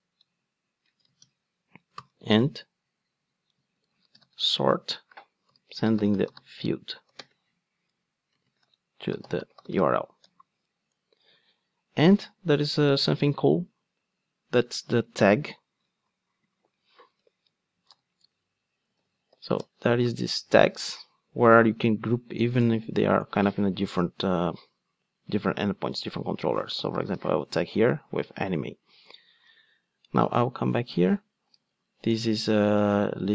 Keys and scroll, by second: 12.7 Return, 15.8 super+z, 19.6 Return.